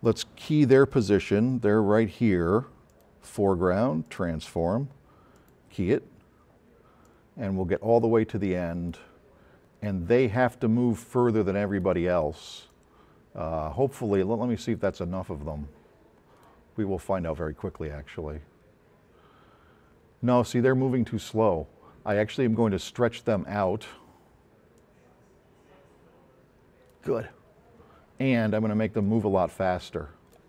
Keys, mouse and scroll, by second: 2.9 click, 4.1 click, 5.4 click, 7.1-9.0 drag, 9.8-12.0 drag, 12.3-16.5 drag, 17.8-22.1 drag, 22.6 middle click, 24.8-25.2 drag.